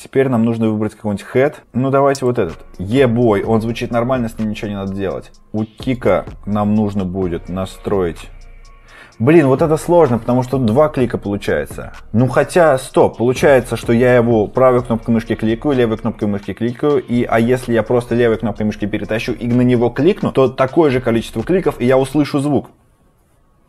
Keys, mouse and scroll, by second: 1.6-2.1 scroll, 2.1 click, 2.1 typing, 3.2-3.6 typing, 5.3 scroll, 5.9 right click, 7.7 click.